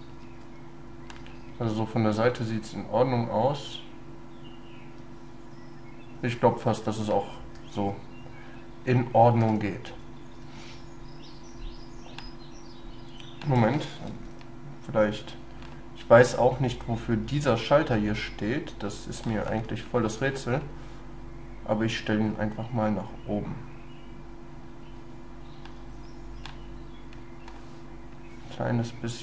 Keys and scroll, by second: 14.2 ctrl+x.